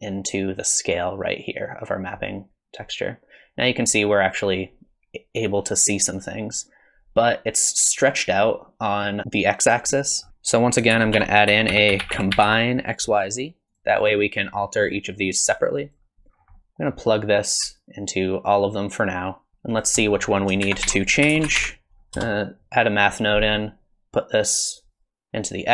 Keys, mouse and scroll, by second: 10.3 Escape, 10.3 click, 10.3 x, 10.9 shift+a, 15.6 click, 16.4 scroll down 3, 16.6 middle click, 17.8 alt+right click, 19.5 alt+right click, 19.5 click, 19.5 scroll up 6, 19.7 click, 20.0 middle click, 20.4 click, 20.6 shift+a, 25.4 click.